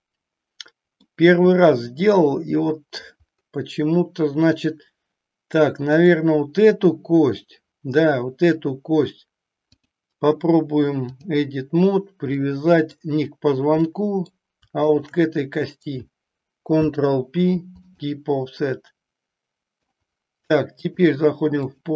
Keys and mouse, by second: 1.0-3.1 middle drag, 5.9 click, 9.6-11.4 drag, 12.4 middle click, 13.9 middle click, 14.9 shift+click, 16.7 ctrl+p, 18.6-19.9 middle drag, 20.9 click.